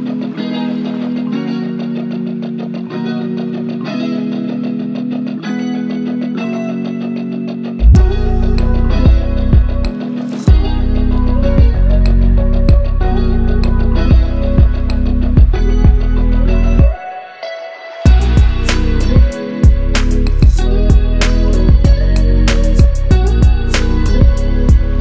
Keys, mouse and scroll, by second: 0.7 t, 1.0 click, 3.4-4.1 click, 4.4 ctrl+c, 4.7 click, 5.2 ctrl+v, 5.8 click, 7.5 ctrl+t, 8.4-9.3 alt+drag, 15.5 scroll up 1, 16.8 ctrl+a, 17.5 click, 18.3 ctrl+d, 18.8 Down, 19.6 scroll down 1, 20.0 Down, 22.8 click, 23.0 ctrl+a, 24.2-24.7 drag.